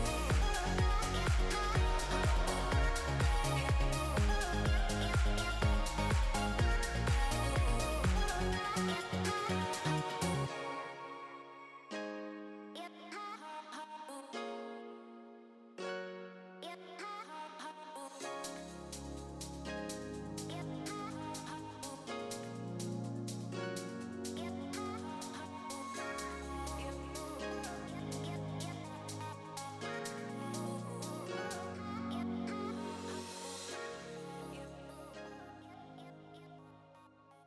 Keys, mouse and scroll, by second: 0.0 click, 1.5 g, 6.2 click, 14.7 click, 15.4 g, 16.8 middle click, 17.8-18.2 scroll up 2, 18.0 middle click, 21.6-22.1 scroll down 3, 21.8 middle click, 23.9 middle click, 29.6 alt+a, 30.1 Tab, 30.4 middle click, 30.6 alt+a, 31.0 shift+middle click, 31.4 scroll down 3, 31.6 shift+middle click, 31.8 middle click, 32.3 shift+middle click, 32.5 middle click, 34.3 scroll down 3, 34.5 shift+middle click, 34.7 middle click.